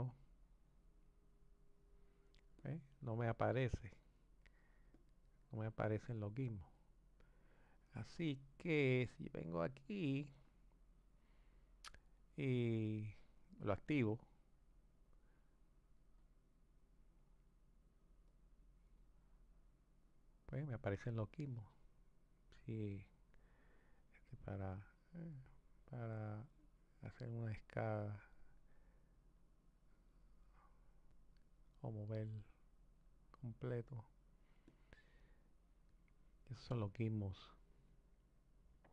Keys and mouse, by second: 2.6 click, 3.9-5.0 drag, 6.1-12.8 drag, 14.7-18.0 drag, 18.3-20.1 drag, 22.7-24.3 drag, 26.2 click, 28.5 click, 31.5 click, 34.6 click.